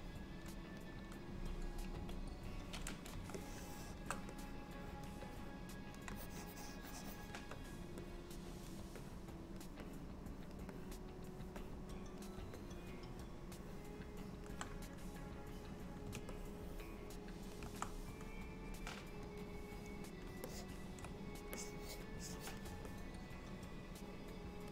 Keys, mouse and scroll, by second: 0.1 click, 2.0 KP_1, 3.5 shift+middle click, 4.4 click, 5.4 click, 6.2 shift+click, 6.4 shift+click, 8.1 click, 9.1 click, 9.9 click, 10.8 click, 11.7 click, 12.7 middle click, 16.4 ctrl+middle click, 19.5 click, 20.5 ctrl+click, 21.6 click, 22.2 click, 22.7 ctrl+click, 22.9 middle click.